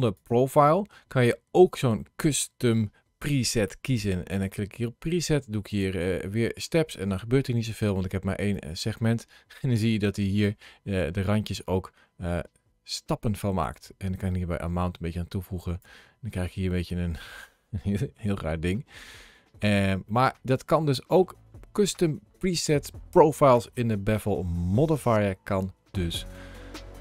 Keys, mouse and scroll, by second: 0.0 click, 2.1 click, 8.4 click, 10.9-11.4 scroll up 1, 11.8-14.0 scroll down 1, 14.0 click, 16.2 middle click, 18.3 shift+middle click, 19.9 middle click.